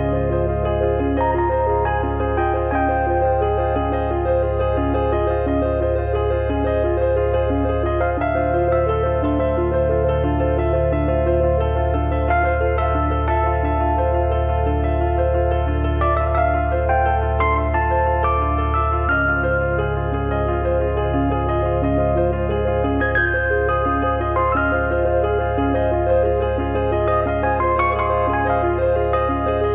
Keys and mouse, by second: 1.9 click, 3.7 click, 4.8 click, 12.2 KP_0, 12.8 click, 16.0 click, 18.1 click, 20.6 click, 22.3 click, 23.4 click, 25.0 click, 28.0 middle click.